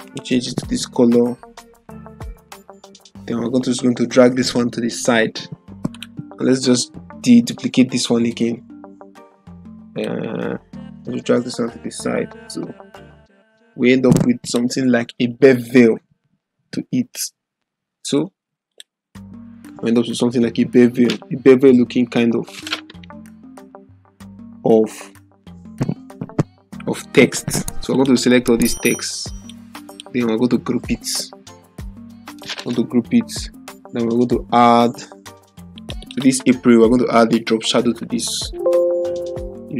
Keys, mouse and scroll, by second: 5.9 click, 8.3 ctrl+j, 9.1-10.1 drag, 14.4 click, 20.9 click, 27.9 click, 29.4 ctrl+click, 31.5 ctrl+g, 35.7 click, 37.8 click.